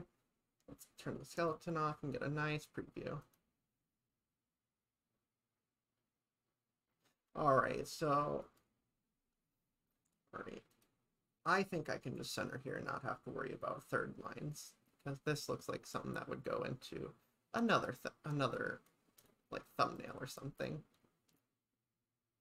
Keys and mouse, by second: 1.4 click, 8.5 click, 10.8 click, 12.2 click, 13.6-18.9 drag.